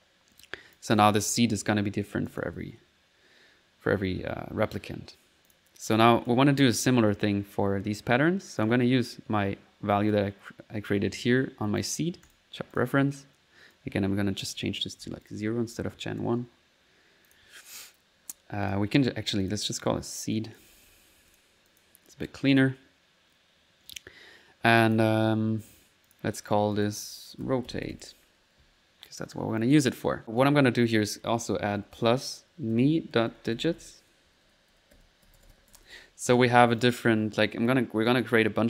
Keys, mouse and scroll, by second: 0.0 alt+z, 0.4 click, 1.3 click, 2.3 click, 2.5 alt+1, 3.3 middle click, 5.5 click, 6.0 click, 8.6 click, 10.1-11.9 drag, 12.7 click, 13.2 click, 13.7-14.8 drag, 17.3 click, 18.6 click, 19.4 click, 20.4 click, 21.7 click, 22.5 click, 24.8 click, 26.1 click, 26.7 click, 27.2 click, 29.6 click, 30.4 click, 36.8 click, 37.5 click, 38.1 click.